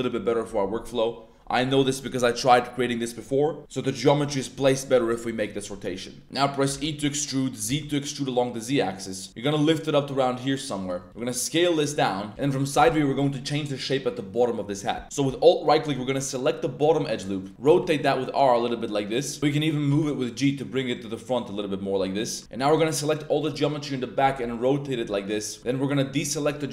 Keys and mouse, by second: 0.1 click, 6.7 e, 7.6 z, 10.8 click, 11.1 s, 11.8 click, 11.9 middle click, 12.3 a, 15.6 alt+click, 17.5 r, 17.6 r, 19.3 click, 19.7 ctrl+z, 19.9 g, 21.9 click, 22.4 b, 24.2 r, 24.9 click, 25.6 c, 26.6 right click.